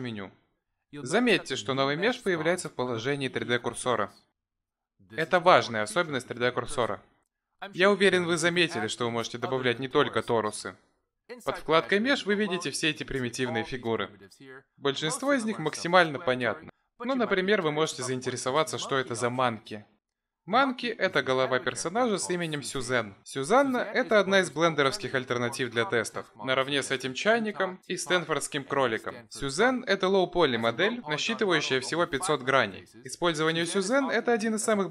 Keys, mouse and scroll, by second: 10.5 click, 34.5 click.